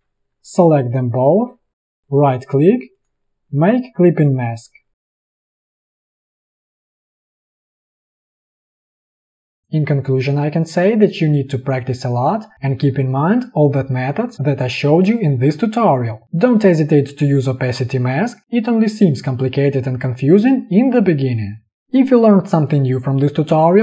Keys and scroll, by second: 5.0 a, 9.0 v, 13.6 ctrl+d, 17.6 space, 17.8 v.